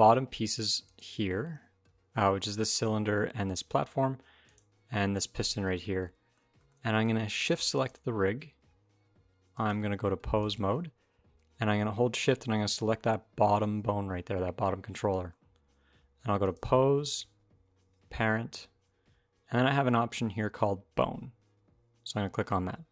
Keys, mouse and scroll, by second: 0.6 shift+click, 4.2 shift+click, 5.4 shift+middle click, 5.6 middle click, 6.4 shift+middle click, 6.7 middle click, 7.5 shift+click, 9.3 click, 12.0 shift+click, 14.5-15.0 scroll down 2, 14.7 middle click, 15.3-16.3 scroll up 1, 16.3 click, 16.3 scroll up 1.